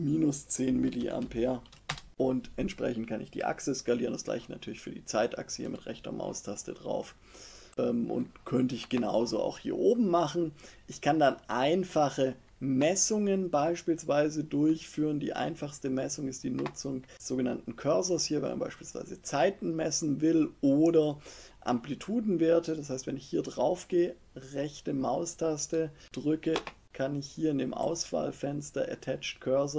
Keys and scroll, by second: 0.3-1.6 typing, 1.8 Return.